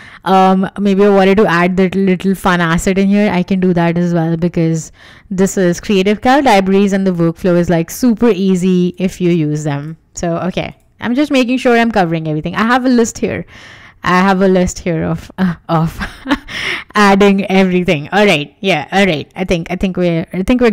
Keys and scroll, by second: 2.5 w.